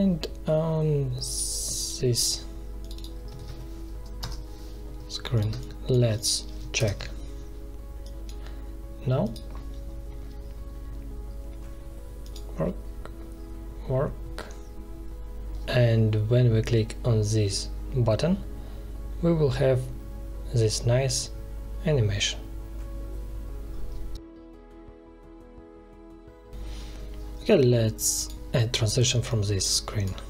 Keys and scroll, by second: 3.3 ctrl+v, 4.1 Return, 5.4 space, 6.7 ctrl+Return, 17.6 ctrl+Return.